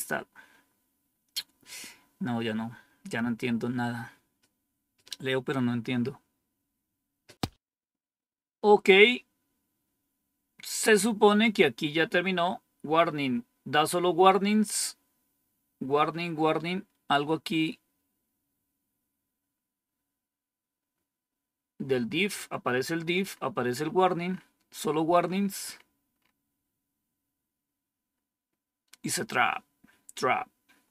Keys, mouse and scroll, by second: 23.0-23.7 scroll up 1, 23.7-28.0 scroll up 1, 28.0-29.2 scroll up 1, 29.2-30.1 scroll down 2, 30.7-30.9 scroll down 4.